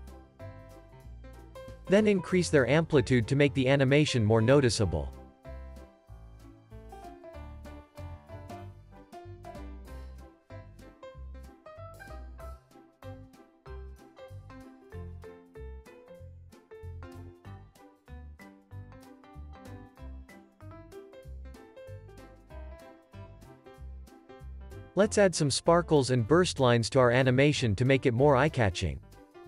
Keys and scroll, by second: 1.0 space, 1.2 super+s, 2.2 z, 4.0 x, 15.1 z, 19.2 space, 23.3 space, 23.6 super+s, 28.2 Tab.